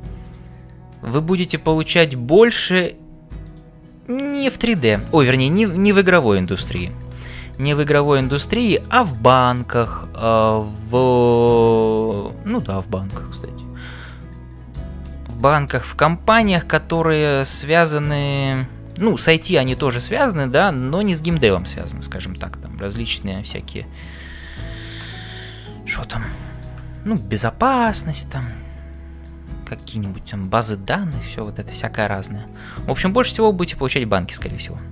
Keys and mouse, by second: 0.3 click, 1.1 g, 2.4 click, 4.6 click, 5.7 g, 7.0 middle click, 7.5 middle click, 7.9 middle click, 8.8 click, 9.3 middle click, 10.1 f, 10.5-13.5 middle drag, 14.0 click, 14.5 middle click, 15.3 middle click, 17.8 click, 18.4 g, 19.5 middle click, 20.0 click, 21.8 middle click, 24.2 g, 25.6-26.8 middle drag, 26.9 shift+middle click, 27.4 middle click, 28.2 shift+middle click, 29.2 middle click, 31.0 shift+middle click, 31.5 middle click, 33.2 click.